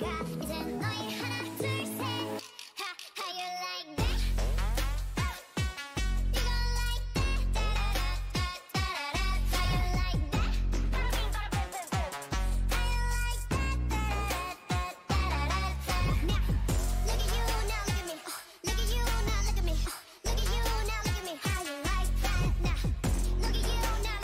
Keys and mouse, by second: 0.5-2.1 right drag, 2.1-3.2 middle drag, 2.1 c, 3.2 click, 3.8 right click, 4.1-5.2 middle drag, 6.4-10.8 drag, 10.2 z, 11.0 Tab, 11.4 a, 12.1-14.6 right drag, 13.4-20.5 drag, 15.9-18.8 right drag, 20.5 Tab, 20.7 a.